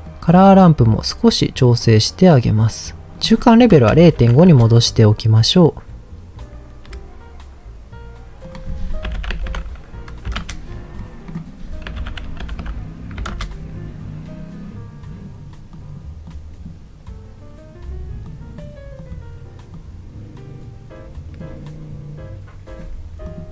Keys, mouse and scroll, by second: 0.1-0.4 drag, 0.9-2.3 drag, 3.1-4.5 drag, 8.4-10.4 drag, 9.4 KP_0, 11.3-13.3 drag, 12.6 KP_0, 15.7 click, 16.3 click, 18.3 click, 18.9 click, 19.7-21.4 drag, 23.2 click.